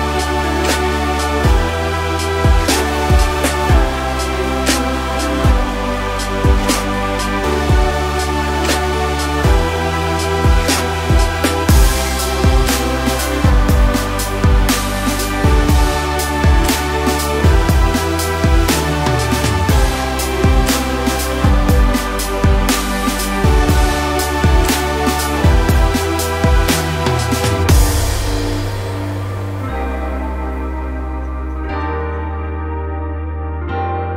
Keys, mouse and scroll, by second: 0.8 middle click, 1.7 scroll up 3, 1.9-4.2 middle drag, 4.2-6.4 drag, 6.4 scroll up 4, 6.5 middle click, 7.2-10.2 drag, 10.4 scroll down 4, 10.5 middle click, 11.5 f, 12.0 scroll up 1, 12.2-16.4 middle drag, 16.4-18.4 drag, 18.4 middle click, 19.2-20.8 drag, 20.8 scroll up 4, 21.4 scroll up 1, 21.6-27.1 drag, 27.2 scroll down 3, 27.3-28.9 middle drag, 28.9-30.1 drag, 30.1 scroll down 2, 30.2 middle click, 30.9 right click, 31.7-34.1 middle drag.